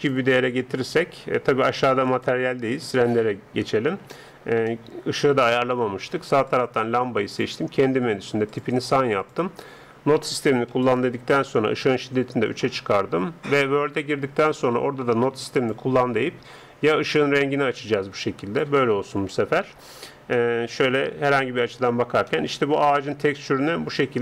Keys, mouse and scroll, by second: 2.2-4.8 drag, 4.8-6.6 middle drag, 6.6-17.4 drag, 19.3-24.2 middle drag.